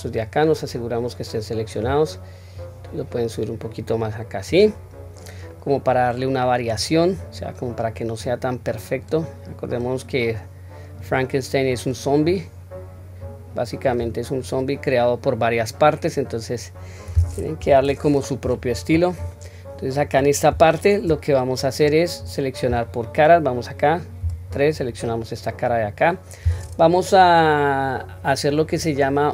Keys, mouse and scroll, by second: 0.1-1.8 middle drag, 2.6-4.5 drag, 5.5-6.7 middle drag, 7.2-7.9 drag, 8.6-11.0 drag, 11.6-12.3 drag, 13.2 click, 13.9 click, 14.2-14.6 scroll down 1, 14.6-17.1 middle drag, 17.6 KP_1, 18.0-18.9 scroll up 1, 18.9-19.3 scroll down 1, 19.3-20.0 middle drag, 20.6-21.1 shift+middle drag, 21.3-22.0 scroll up 1, 22.0-22.4 scroll up 1, 24.2 3, 25.0 click, 25.6-26.3 middle drag.